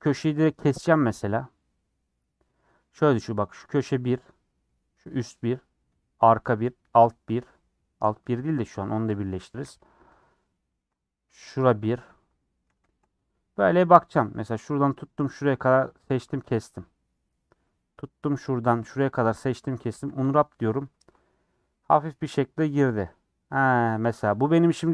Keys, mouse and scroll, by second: 0.8 ctrl+Left, 1.4-9.6 middle drag, 9.6 click, 9.8-10.8 middle drag, 10.8 ctrl+click, 11.9 scroll down 1, 12.0-13.1 middle drag, 13.1 scroll up 2, 13.4-14.5 middle drag, 14.5 click, 15.6-18.0 middle drag, 18.0 click, 18.4 click, 19.3 ctrl+click, 19.8 a, 20.1 u, 24.8 middle click.